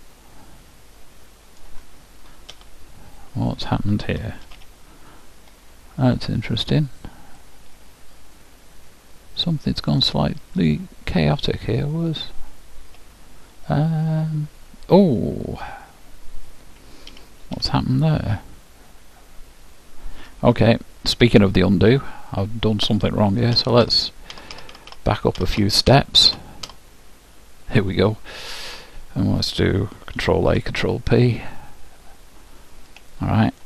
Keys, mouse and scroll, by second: 2.5 alt+h, 4.5 z, 5.5-9.6 middle drag, 10.6-12.4 drag, 12.9 KP_Decimal, 13.9-19.0 middle drag, 17.1 a, 19.6 middle click, 23.5 ctrl+z, 23.9 ctrl+z, 24.3 ctrl+z, 24.5 ctrl+z, 24.7 ctrl+z, 24.9 ctrl+z, 25.4 ctrl+z, 25.6 ctrl+z, 25.9 ctrl+z, 26.3 ctrl+z, 26.7 ctrl+z, 30.2 ctrl+a, 30.5 ctrl+p, 32.5-33.6 middle drag.